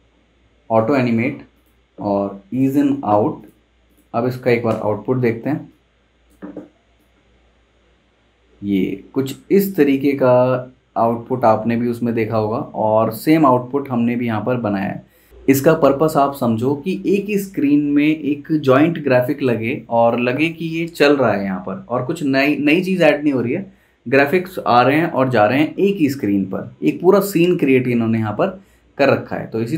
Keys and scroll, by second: 4.7 super+Return.